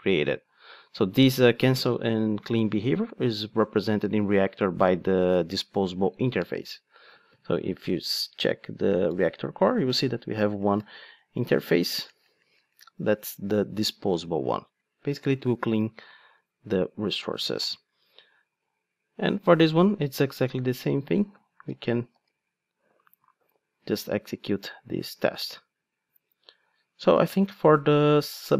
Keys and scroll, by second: 7.7 Right, 8.0 Down, 8.9 Up, 9.0 Right, 9.3 Down, 9.5 Right, 9.6 Down, 9.8 Right, 10.3 Left, 10.5 Down, 10.8 Right, 10.9 Down, 11.4 Right, 12.0 Down, 17.6 alt+super+l, 22.1 ctrl+shift+d.